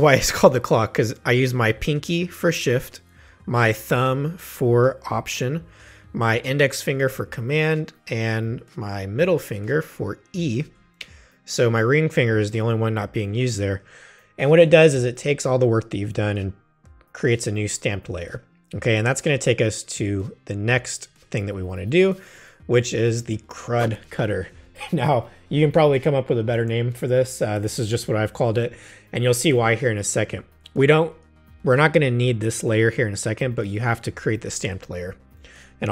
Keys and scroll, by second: 10.6 alt+shift+super+e.